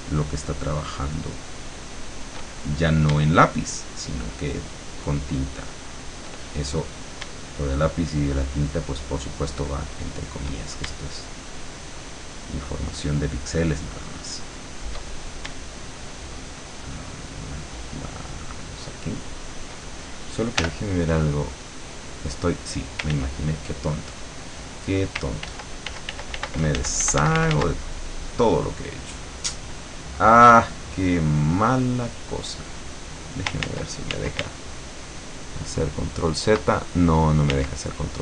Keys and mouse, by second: 0.4-2.3 shift+drag, 3.8-6.2 shift+drag, 8.0-10.4 shift+drag, 11.5-15.0 shift+drag, 16.3-19.6 shift+drag, 19.8 shift+click, 20.6 l, 23.2 ctrl+z, 25.4 ctrl+z, 32.6 click, 33.6 ctrl+z, 37.5 ctrl+z.